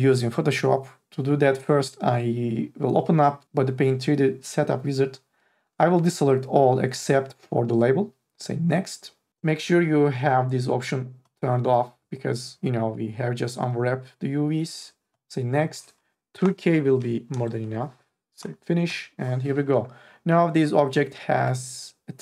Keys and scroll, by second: 16.6-18.0 typing.